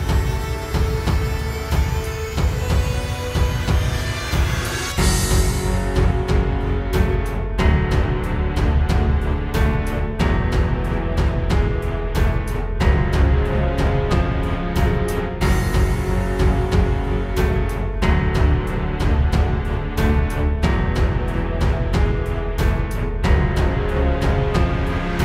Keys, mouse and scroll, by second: 0.0 scroll down 2, 0.9 click, 1.6-3.5 scroll down 7, 4.0-4.8 scroll down 2, 4.8 middle click, 5.6 middle click, 6.3-6.6 middle click, 6.5 middle click, 8.8 space, 11.4 click, 11.7 click, 12.4-13.4 scroll up 5, 13.4 middle click, 14.4-15.2 scroll up 3, 15.2 right click, 16.0 middle click, 17.2 shift+right click, 19.3 ctrl+p, 22.2-23.2 scroll down 1, 23.2 scroll down 1, 23.2 KP_0, 24.2-25.0 scroll up 1, 25.0 right click.